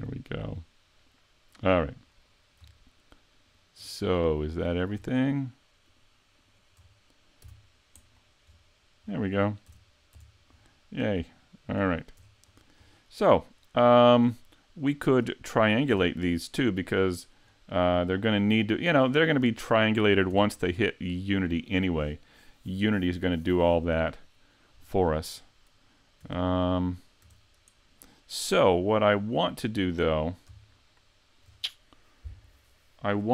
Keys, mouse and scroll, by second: 3.5 shift+right click, 4.0 middle click, 5.9 shift+right click, 6.4 shift+right click, 6.8-7.1 scroll down 4, 7.4 x, 8.5-9.1 scroll up 2, 9.1-9.6 scroll down 1, 9.6 scroll down 1, 9.7 Tab, 10.2 Tab, 10.6 middle click, 11.8-12.6 scroll up 4, 12.2 Tab, 13.0 shift+middle click, 14.5-15.1 scroll down 2, 15.9 Tab, 17.5 scroll up 2, 18.3-19.1 scroll down 1, 19.1 scroll down 1, 20.3 Tab, 20.7 middle click, 25.0 right click, 25.3-26.3 scroll down 2, 26.3 Tab, 26.6-27.3 scroll up 1, 27.3 Tab, 27.3-27.6 scroll up 2, 28.6 click, 29.7 scroll up 1, 30.7 shift+middle click.